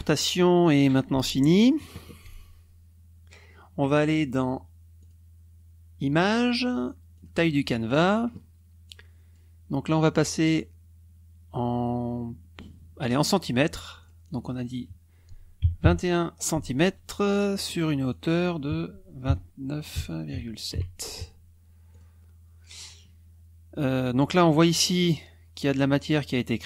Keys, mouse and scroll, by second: 5.0 click, 7.1 click, 8.8 click, 9.8 click, 13.0 click, 14.0 click, 15.6 KP_2, 15.8 KP_1, 17.4 click, 18.1 click, 19.2 KP_2, 19.9 KP_9, 20.3 KP_Decimal, 20.6 KP_7, 21.9 click.